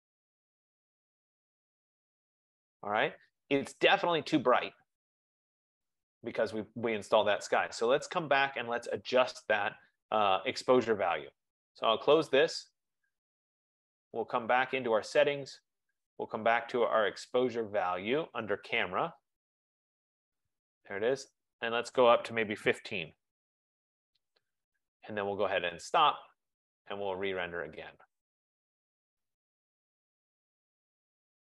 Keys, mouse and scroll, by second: 6.6 F15, 11.7 click, 15.0 click, 19.4-19.8 scroll, 21.1 click, 22.0 click, 23.5-29.2 typing, 24.0 middle click, 26.0 click, 30.0 click.